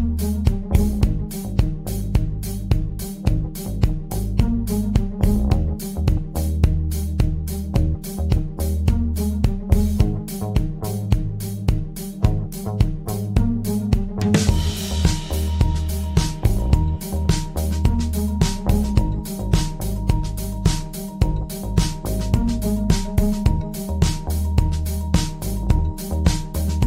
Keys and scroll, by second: 1.2 ctrl+z, 4.6 space.